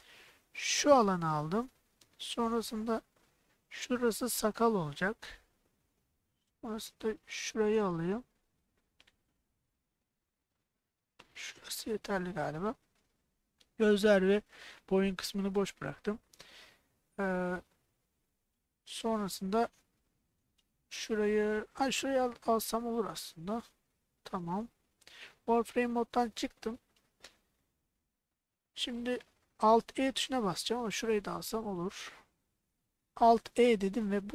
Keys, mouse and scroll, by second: 0.4-1.4 shift+drag, 4.3-5.3 shift+drag, 7.3-11.5 shift+drag, 15.7-18.5 middle drag, 20.6 middle click, 22.5 shift+click, 23.0 shift+click, 24.0 middle click, 25.2 alt+z, 25.8-27.3 middle drag, 28.4 middle click, 30.8 shift+click, 31.6-32.7 middle drag, 33.5 alt+e.